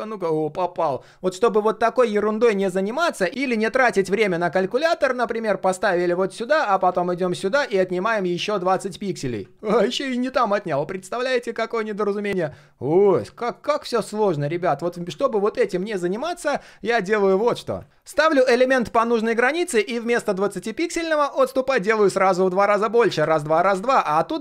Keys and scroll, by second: 3.3 ctrl+z, 9.8 ctrl+z, 10.2 ctrl+z.